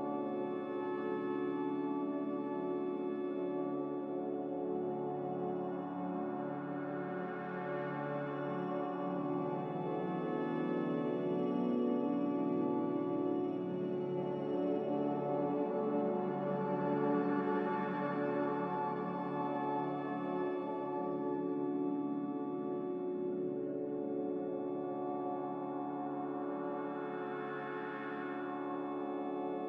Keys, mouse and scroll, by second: 4.5 x, 9.6-12.8 typing, 15.6-16.5 typing, 17.7 a, 20.7 Delete, 21.3 Delete, 26.4 ctrl+c, 26.8 ctrl+r.